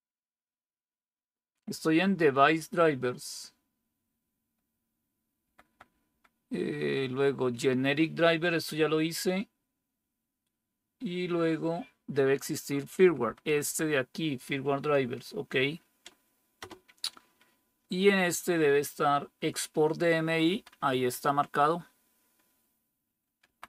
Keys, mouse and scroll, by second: 5.3 End, 5.5 Down, 5.8 Down, 6.0 Down, 12.9 Down, 13.1 Down, 13.4 Down, 13.5 Down, 16.5 Return, 20.5 Down, 20.6 Down, 23.5 Right.